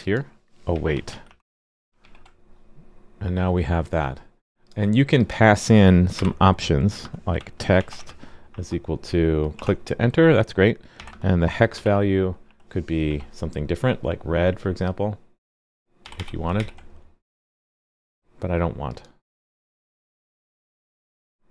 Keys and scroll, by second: 2.0 super+s, 16.5 super+s.